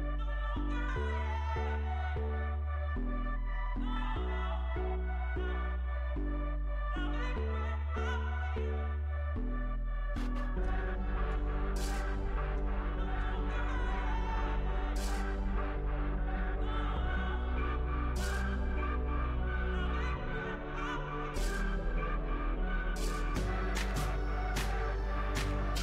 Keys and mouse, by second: 1.9 z, 2.5 z, 5.9-15.9 middle drag, 16.4-17.9 right drag, 17.9-19.9 drag, 19.9 x, 24.0 right click, 24.9 x.